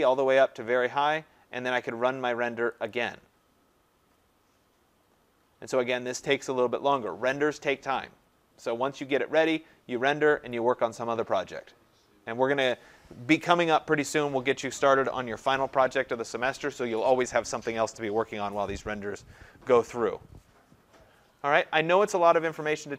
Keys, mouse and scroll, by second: 0.0 click, 2.9 click.